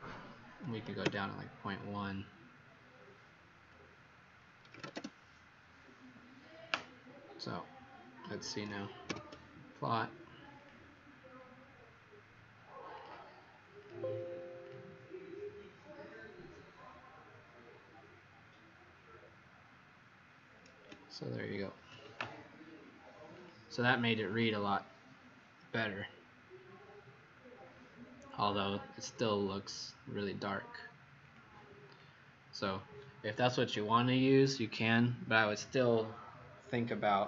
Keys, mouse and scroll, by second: 0.6 KP_1, 1.0 Return, 4.4-5.2 typing, 9.0 ctrl+p, 10.5 click, 27.8-29.1 scroll down 3, 29.1 z, 31.1 click.